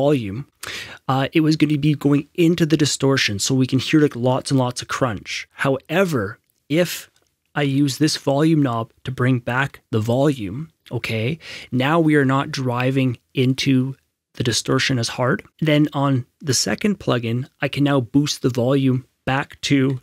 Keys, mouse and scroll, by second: 0.5 F6, 7.5 click, 7.6 F6, 9.9 F6, 10.0 F6, 19.8 F6.